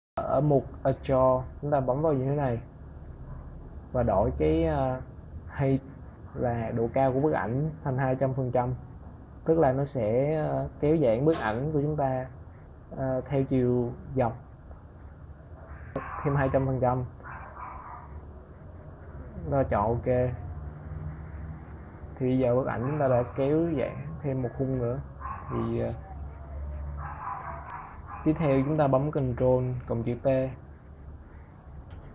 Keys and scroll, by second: 23.0 ctrl+0, 28.9 ctrl+t.